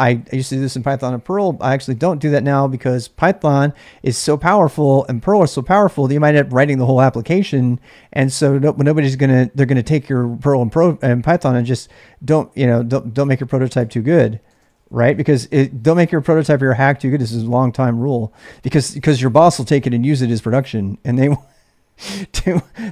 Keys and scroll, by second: 0.0-1.9 typing, 12.4 ctrl+[, 12.6-15.5 typing, 21.9-22.9 typing.